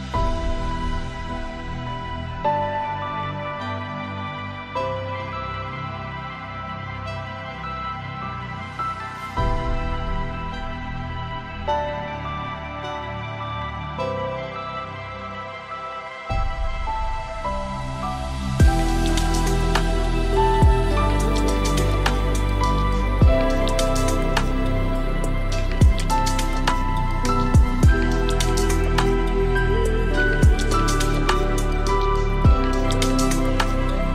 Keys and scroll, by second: 3.2 ctrl+z, 6.8 ctrl+z.